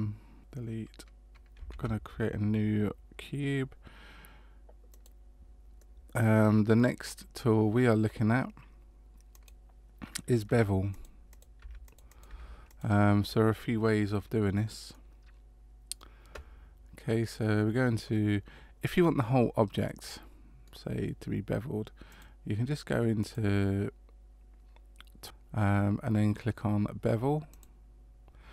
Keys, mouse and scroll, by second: 0.4 Tab, 0.4 x, 1.7 shift+a, 5.8 middle click, 7.1-8.8 scroll down 1, 9.3 click, 11.3 click, 12.1 click, 14.9 middle click, 19.8 middle click, 22.1 click, 23.2 click, 25.2 click.